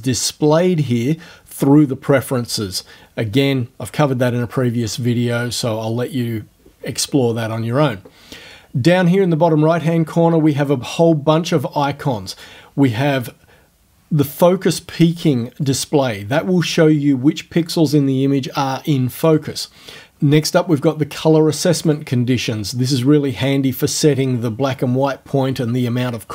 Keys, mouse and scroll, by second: 15.7 click, 19.3 click, 21.9 click.